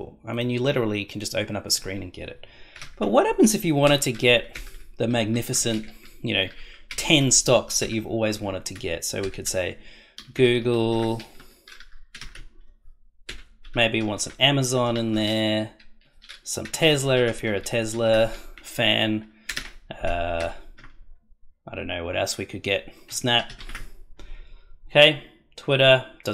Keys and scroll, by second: 2.8 ,, 3.8-5.3 typing, 6.0 Right, 6.9-9.5 typing, 10.6 shift+l, 11.4 Right, 12.1 ,, 12.2 space, 13.2-14.9 typing, 15.5 Right, 16.6-17.9 typing, 18.5 Right, 19.4 ,, 19.5 space, 20.3 shift+', 23.2 shift+s, 23.3 shift+n, 23.4 shift+a, 23.5 shift+p.